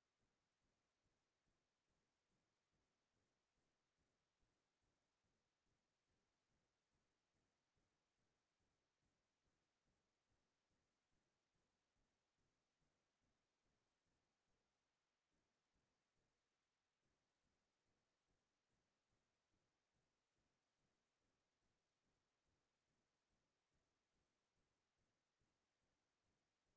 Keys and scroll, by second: 13.1 BackSpace, 16.6 ctrl+c, 20.2 ctrl+v, 23.7 ctrl+v.